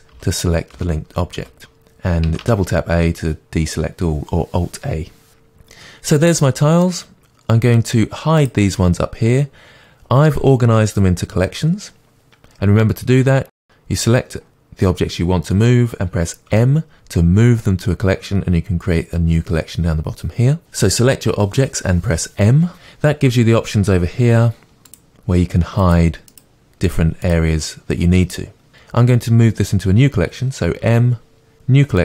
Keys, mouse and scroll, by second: 2.3 a, 5.3 Tab, 5.6-6.2 scroll down 2, 6.2-8.5 middle drag, 8.5 click, 13.7 shift+click, 24.9 click.